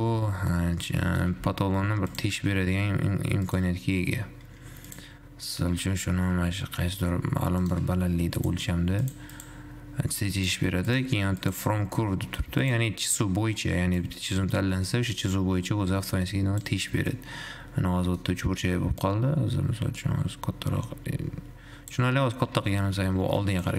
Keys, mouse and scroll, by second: 0.5-0.9 scroll down 1, 0.9 middle click, 1.5 g, 2.4 g, 4.0-5.1 scroll up 4, 5.1 click, 6.9 g, 8.6-9.7 drag, 10.6 click, 11.6-12.9 drag, 15.0 click, 15.9-17.4 drag, 17.4-18.5 middle drag, 18.5-19.4 scroll up 1, 19.4-20.4 shift+drag, 21.4-22.4 shift+drag, 22.4-22.9 scroll down 2, 22.9 g.